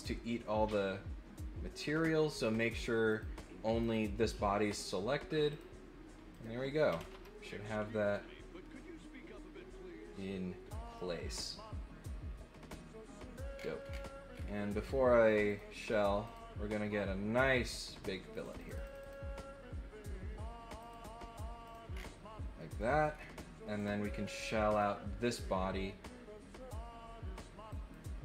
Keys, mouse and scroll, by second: 2.5 click, 3.0 click, 3.8 click, 5.5 click, 6.3 click, 7.4-10.9 middle drag, 13.4 scroll up 1, 13.5 scroll down 1, 13.8 scroll up 1, 14.3 scroll up 1, 15.5 click, 16.2 click, 18.3 click, 18.5 click, 18.6 click, 18.8 click, 18.9 click, 20.8 click, 21.6 click, 21.9 scroll down 1, 22.5 middle click, 23.1 scroll up 2, 23.8 click, 24.2 scroll up 2, 24.7 click, 27.6 click.